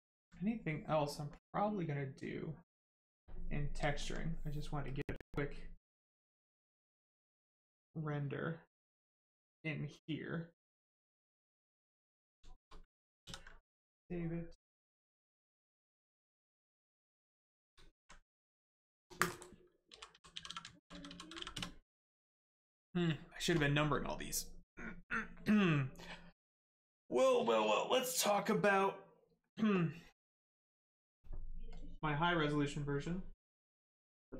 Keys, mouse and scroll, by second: 0.1 alt+right click, 3.3 right click, 3.9 alt+right click, 4.2 right click, 4.9 click, 11.9 right click, 13.2 ctrl+s, 16.0 click, 19.9-21.3 typing, 31.7 click.